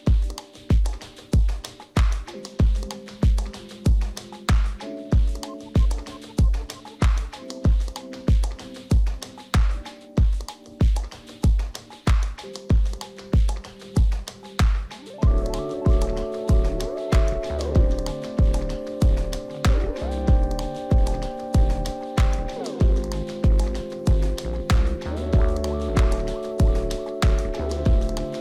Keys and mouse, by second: 0.1-1.9 drag, 2.3 right click, 2.8 click, 4.4 click, 5.7 click, 6.2 right click, 6.6 r, 10.5 right click, 11.1 click, 11.4 click, 12.7 click, 13.0 r, 13.9 click, 14.3 click, 14.7 r, 14.9 right click, 15.2 click, 15.5 r, 18.6 click, 19.4 right click, 20.1 right click, 20.8-22.8 drag, 24.4 right click, 25.3 right click, 25.8-26.8 drag, 27.2 right click, 27.9 right click.